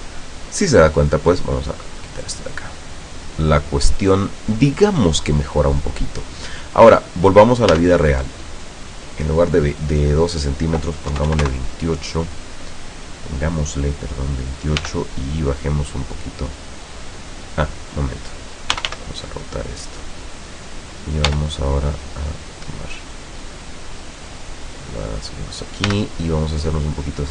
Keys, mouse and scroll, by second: 0.0 KP_0, 2.1 click, 2.9-3.4 scroll up 2, 4.0 scroll down 2, 4.4 scroll up 2, 7.8 Tab, 8.2 right click, 10.4 click, 11.2 KP_2, 11.4 KP_8, 11.6 KP_Enter, 14.9 g, 18.1 click, 18.8 r, 20.4 click, 21.4 g, 25.3 click, 26.0 g, 26.2 middle click.